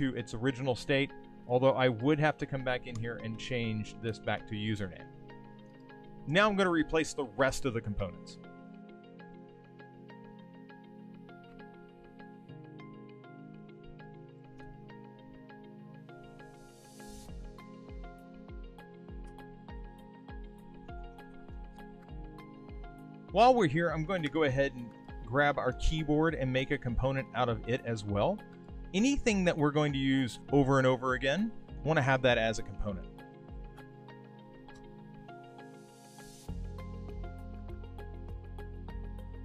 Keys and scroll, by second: 12.0 super+z, 20.7 shift+t, 22.0 shift+/, 25.7 super+c, 31.2 super+v.